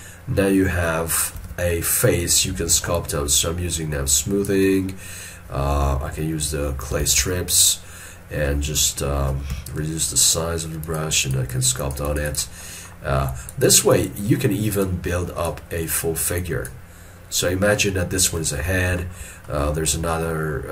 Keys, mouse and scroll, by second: 1.5 alt+e, 3.0 shift+click, 7.0 space, 11.3 double click, 17.5 scroll down 1, 19.1 shift+middle click.